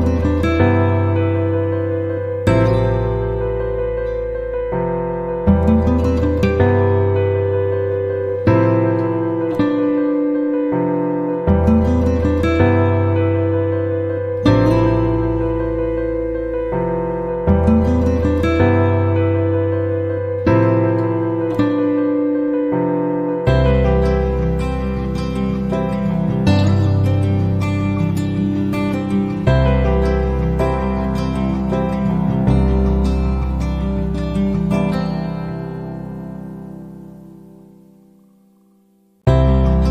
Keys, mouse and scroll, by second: 1.8 click, 2.9 click, 9.4 click, 12.4 click, 13.4 click, 17.5 click, 20.1 click, 21.0 click, 22.8 click, 25.4 click, 26.4 ctrl+click, 27.7 click, 29.2 click, 33.2 click, 33.8 right click, 35.6 click, 36.8 click, 37.5 click, 38.7 click.